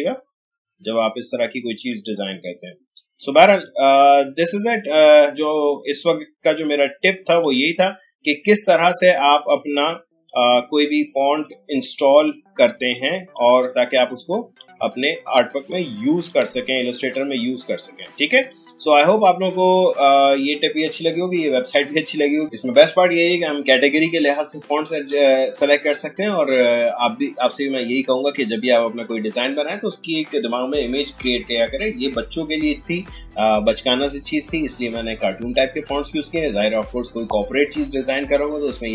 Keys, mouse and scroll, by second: 1.7 click, 2.5 alt+scroll down 1, 3.4 space, 3.6 click, 3.9 space, 5.4-7.3 drag, 8.8-9.2 alt+scroll down 1, 9.2 alt+scroll up 1, 10.3-12.9 drag, 13.1 space, 13.3 click, 13.6 space, 14.9-15.3 alt+scroll down 1, 15.7 click, 16.4 space, 16.5 click, 17.3 click.